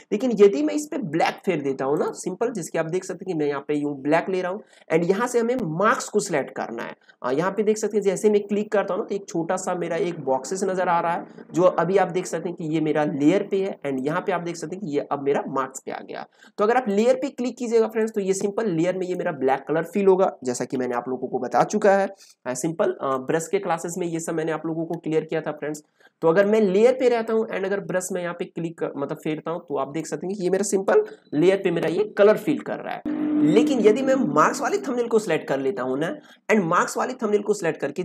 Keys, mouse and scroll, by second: 1.9 click, 1.9 p, 13.9 click, 16.0 typing, 16.8-20.6 drag, 20.6 ctrl+z, 22.2-26.3 alt+right drag, 26.3-30.8 drag, 30.8 ctrl+z, 33.0 click.